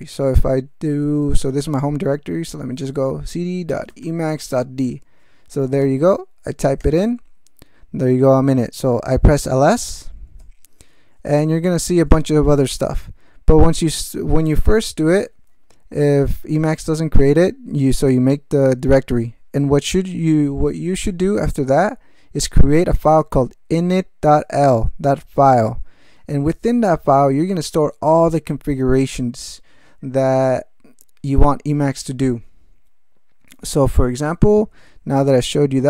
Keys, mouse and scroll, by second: 0.8-1.6 typing, 3.5-4.4 typing, 6.8 Return, 9.6-10.4 typing, 16.7-18.3 drag, 22.9-24.6 drag.